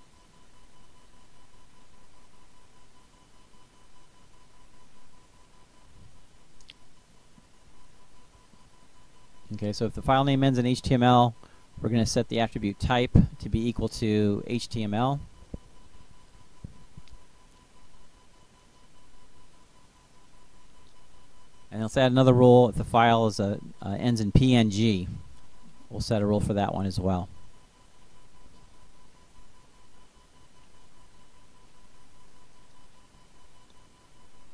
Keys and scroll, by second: 0.8 Down, 2.3 Return, 3.6-6.9 typing, 11.8-13.0 typing, 13.1 Tab, 14.1-15.3 typing, 21.8-23.9 typing, 30.7-34.1 typing.